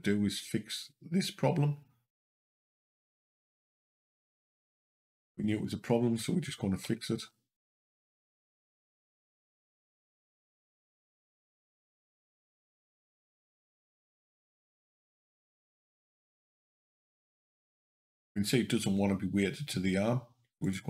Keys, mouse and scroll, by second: 2.2 click, 5.3 click, 6.7 l, 7.0 l, 9.0 click, 11.1 click, 14.5 Up, 15.3 Up, 15.9 Down, 16.1 Down, 20.5 click.